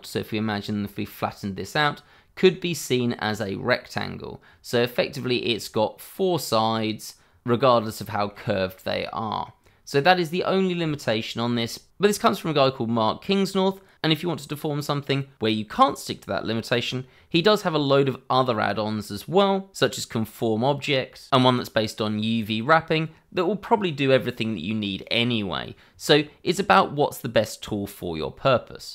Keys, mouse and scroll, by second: 0.5 scroll down 1, 0.8 middle click, 7.5 middle click, 8.0 shift+middle click, 8.4 middle click, 10.4 scroll up 1, 10.8 shift+middle click, 12.1 shift+middle click.